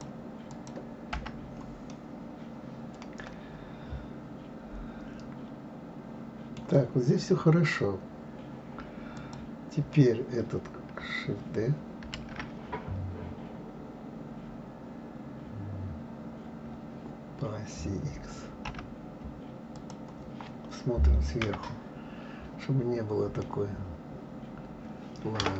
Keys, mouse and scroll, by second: 0.5 click, 1.1 Delete, 1.9-5.0 middle drag, 9.2 click, 12.2 shift+d, 21.4 KP_7, 23.4-25.5 middle drag.